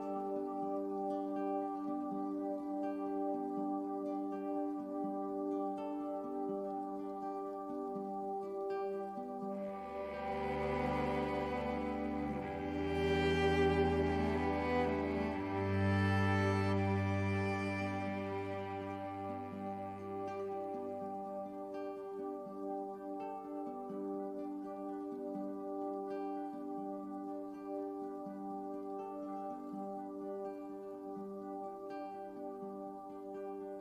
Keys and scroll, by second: 0.8 i, 13.5 i.